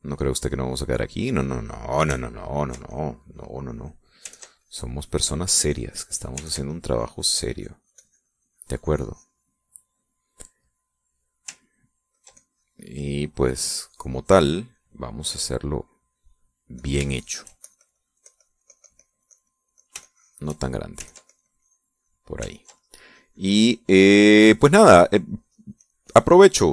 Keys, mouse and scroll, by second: 0.0-2.0 ctrl+drag, 2.1 middle click, 3.2 ctrl+click, 3.5-4.7 ctrl+drag, 5.0-10.2 ctrl+drag, 10.3-11.8 middle drag, 12.2 ctrl+click, 12.8-15.4 ctrl+drag, 17.4 shift+click, 17.7-21.3 shift+drag, 21.7-22.9 ctrl+drag, 23.2-26.7 ctrl+drag.